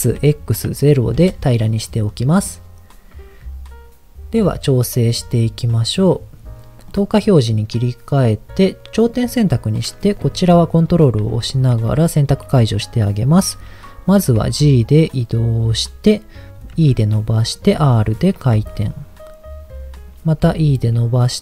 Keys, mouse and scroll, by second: 0.1 x, 0.6 KP_0, 1.1 KP_Enter, 2.0 middle click, 4.4 KP_1, 6.8 click, 9.0 click, 10.3 ctrl+click, 11.3 shift+middle click, 14.5 g, 15.7 click, 16.7 e, 17.4 click, 17.7 r, 18.4 click, 18.5 g, 19.9 click, 20.5 e, 21.1 click.